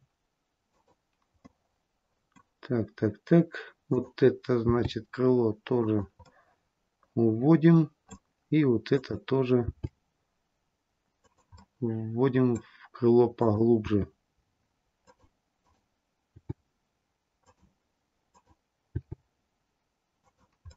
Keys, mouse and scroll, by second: 1.4 middle click, 2.2-2.7 scroll down 1, 3.8 click, 4.6 g, 6.2 middle click, 8.8 click, 9.7 g, 11.4 middle click, 13.2 click, 13.8 g, 15.5 click, 16.2 g, 18.2 click, 18.9 g, 20.6 middle click.